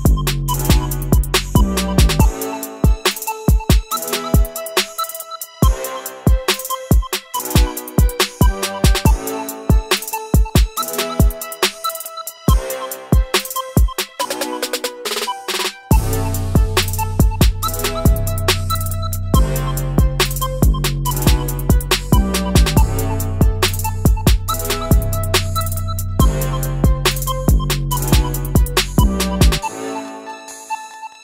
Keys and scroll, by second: 6.7 Up, 6.8 Right, 7.0 Down, 7.3 Left, 10.1 Up, 10.2 Right, 19.2 Delete, 19.9 Delete, 23.3 ctrl+c, 26.8 ctrl+shift+v, 30.9 ctrl+c.